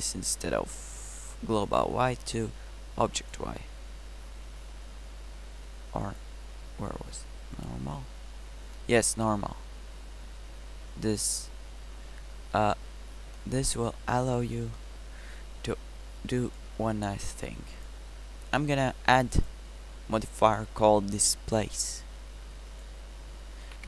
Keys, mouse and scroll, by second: 8.9-10.6 middle drag, 12.9-13.7 middle drag.